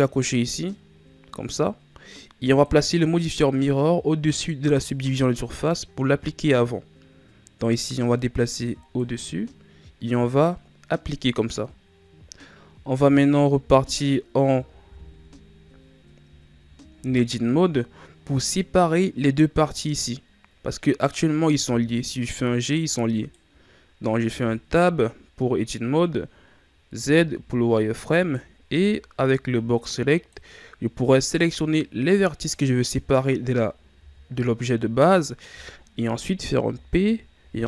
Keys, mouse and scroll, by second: 0.5 click, 2.4-5.6 drag, 7.8-8.9 drag, 10.3-13.3 drag, 21.6 g, 24.2 Tab, 26.9 z, 28.1 right click, 28.6 b, 31.7-33.9 middle drag, 33.9 KP_3, 36.6 p.